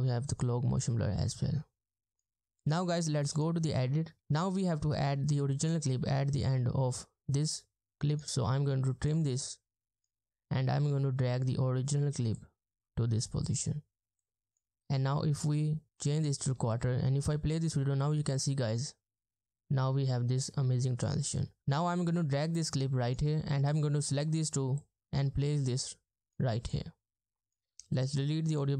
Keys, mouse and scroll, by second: 4.2 space, 16.6 space, 20.5 space.